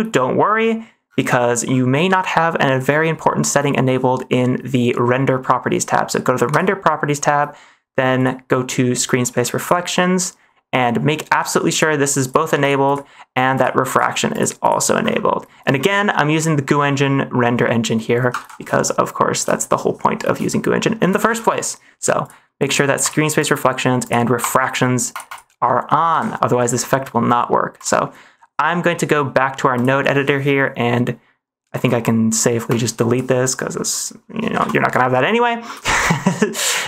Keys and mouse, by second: 8.1 click, 9.5 click, 12.2 click, 12.5 click, 13.4 click, 14.2 click, 18.4 ctrl+s, 18.8 shift+middle click, 20.4 shift+middle click, 21.2 ctrl+s, 22.2 click, 22.6 click, 23.3 click, 23.9 click, 24.3 click, 25.0 click, 25.2 click, 26.1 ctrl+s, 27.7 click, 29.1 middle click, 30.3 middle click, 31.9 middle click, 32.6 click, 34.5 Delete, 35.0 middle click, 35.3 middle click, 35.7 ctrl+s, 36.5 middle click.